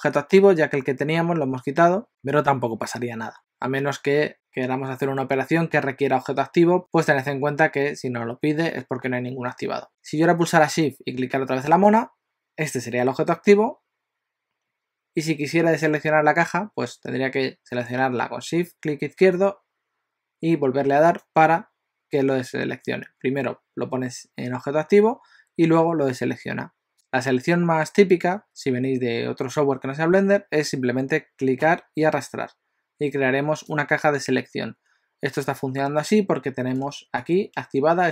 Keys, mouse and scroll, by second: 12.0 shift+click, 19.2 shift+click, 31.6 click, 35.7 alt+a.